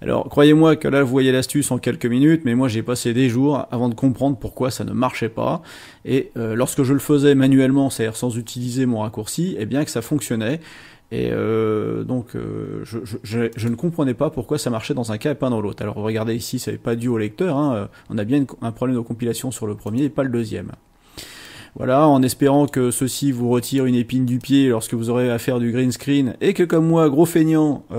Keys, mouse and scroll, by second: 10.0 right click, 13.5 click, 19.9 click, 21.4-22.8 drag, 23.6 click, 24.4-26.9 drag.